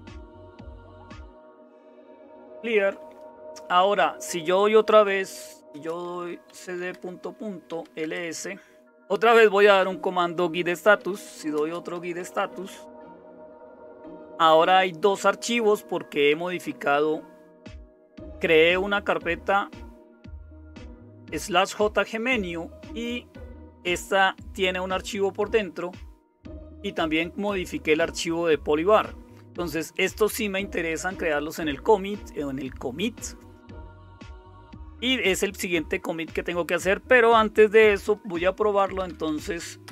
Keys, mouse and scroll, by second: 2.0-3.2 typing, 5.1-8.3 typing, 10.6-13.3 typing, 38.5-39.7 typing, 39.8 Return.